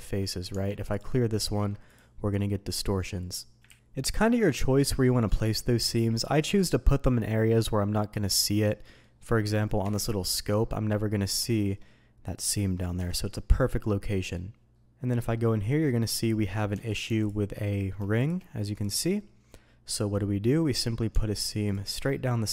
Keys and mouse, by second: 0.5 Tab, 1.4 ctrl+e, 3.6 ctrl+z, 5.5 middle click, 8.8 middle drag, 9.8 KP_Divide, 10.5 middle click, 11.4 shift+click, 13.2 KP_Divide, 13.8-14.3 middle drag, 14.7 middle click, 15.8 middle click, 16.4 middle click, 16.7 Tab, 17.2 alt+click, 17.6 middle click, 18.2 shift+middle click, 18.8 ctrl+click, 19.1 middle click, 21.1 Tab, 21.6 click, 22.3 middle click.